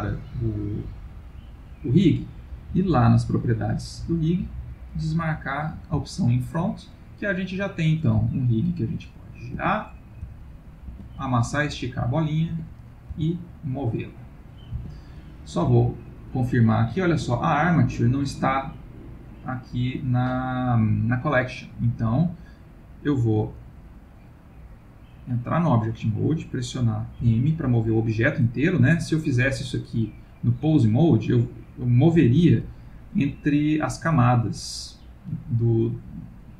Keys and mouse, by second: 0.8 middle click, 3.2 click, 5.3 click, 6.0 ctrl+middle click, 6.8 middle click, 7.7 click, 8.2 r, 10.1 click, 10.3 g, 11.6 click, 11.9 g, 13.0 click, 13.2 g, 24.7 click, 27.2 m, 29.6 click, 32.2 m.